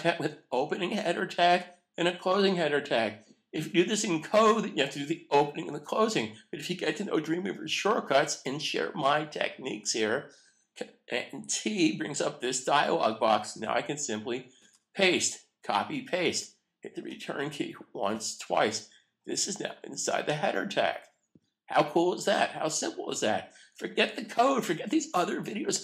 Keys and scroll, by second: 14.5 super+v, 17.1 Return.